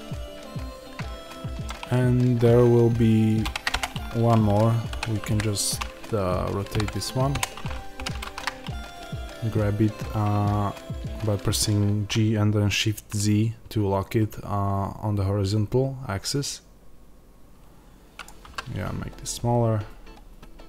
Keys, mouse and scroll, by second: 1.6-3.3 scroll down 1, 3.3 shift+d, 3.7 Return, 7.3 KP_Enter, 7.9 g, 18.1 click, 18.3 s.